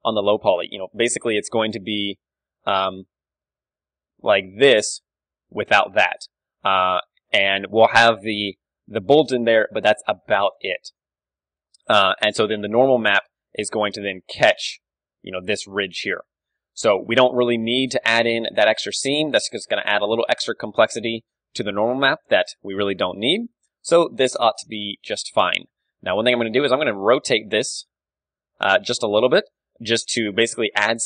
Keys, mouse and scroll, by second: 2.1 Tab, 3.5 l, 5.5 h, 7.1 alt+h, 7.7 a, 10.5 click, 10.8-15.7 middle drag, 13.0 Tab, 13.4 d, 15.7 d, 16.0 d, 16.3-17.9 drag, 18.1-19.2 middle drag, 18.1 d, 19.1 d, 19.2-22.1 right drag, 20.6 a, 22.1-26.1 middle drag, 22.4 KP_1, 25.3 Tab, 26.3 l, 27.4 r, 29.6 click, 29.7 Tab, 29.9-31.0 middle drag.